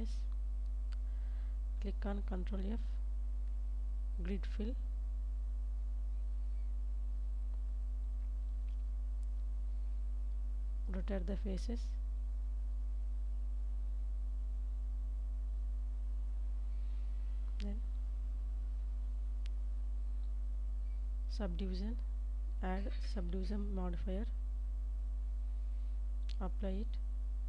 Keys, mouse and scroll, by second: 0.9 KP_7, 2.7 ctrl+f, 12.3 click, 13.1 click, 13.8 click, 16.4 Tab, 18.7-22.2 drag, 26.0 click.